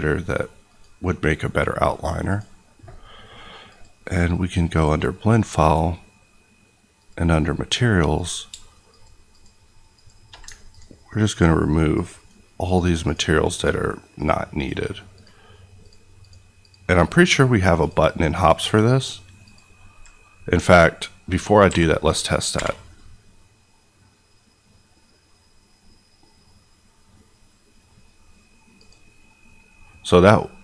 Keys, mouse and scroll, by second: 8.4 shift+click, 9.3 shift+click, 13.0 ctrl+click, 14.5 ctrl+click, 16.2 ctrl+click, 17.7 ctrl+click, 18.9 ctrl+click, 19.4 ctrl+click, 21.6 a, 21.9 middle click, 28.7 click.